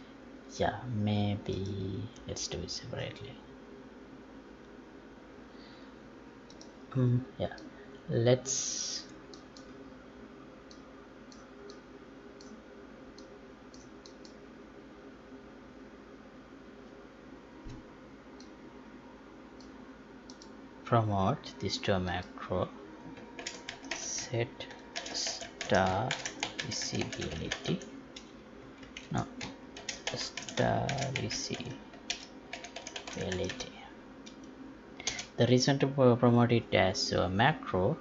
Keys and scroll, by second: 29.2 ctrl+a.